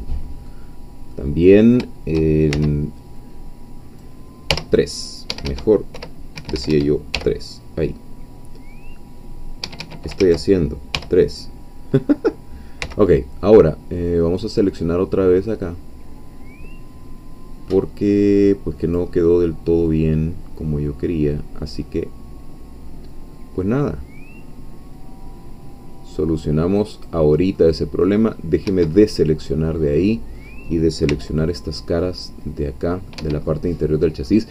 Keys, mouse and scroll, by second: 0.7-1.1 scroll down 2, 1.1-2.1 middle drag, 2.5 shift+c, 3.2-4.5 drag, 4.5 3, 5.3 Escape, 5.9 4, 6.5 Escape, 7.1 e, 9.7 Escape, 10.2 ctrl+z, 10.9 3, 12.3-12.8 scroll down 2, 12.8 c, 13.5-19.1 drag, 19.2-19.5 scroll down 2, 19.9-27.3 drag, 27.6-28.8 middle drag, 28.7 Escape, 28.9-31.1 middle drag, 31.1 c, 31.7-34.5 middle drag, 33.2 Escape.